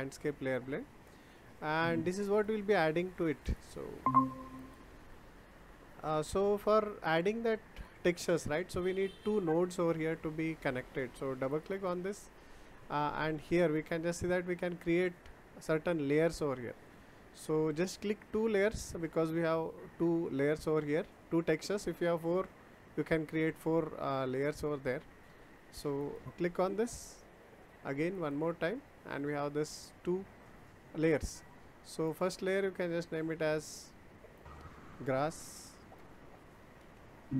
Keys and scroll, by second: 35.8-37.3 typing.